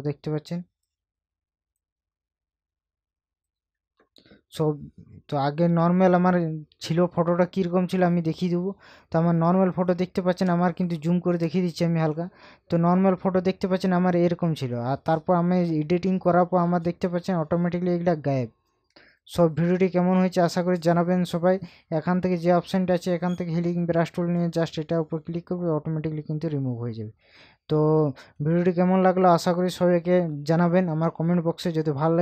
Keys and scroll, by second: 5.0 ctrl+KP_Subtract, 10.4 ctrl+KP_Add, 27.1 ctrl+KP_Subtract.